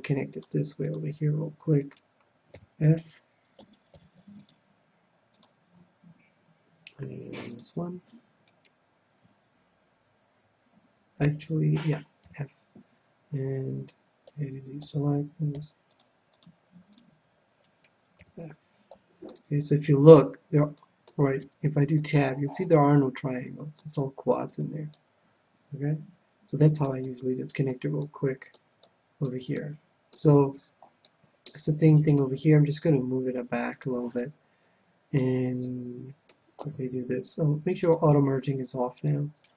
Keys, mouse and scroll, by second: 1.8-3.6 right drag, 2.5 f, 3.6 a, 3.9 c, 8.6-10.4 right drag, 12.2 f, 14.8 a, 15.5 c, 17.7-19.5 right drag, 18.2 f, 18.9 a, 19.3 middle click, 21.5 Tab, 23.3 middle click, 24.5 Tab, 24.7-26.7 middle drag, 27.0-32.6 middle drag, 32.0-33.7 right drag, 33.0 g, 33.9-35.5 drag, 35.7-37.3 middle drag, 36.6 a, 38.9 click.